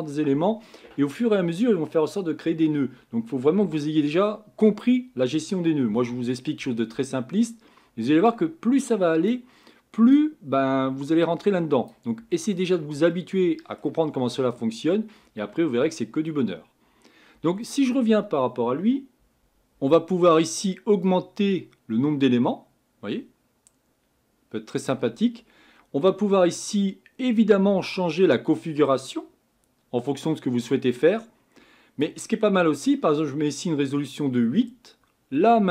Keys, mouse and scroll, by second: 16.3-19.4 middle drag, 19.4 scroll up 4, 21.5-24.0 drag, 27.4-29.7 drag.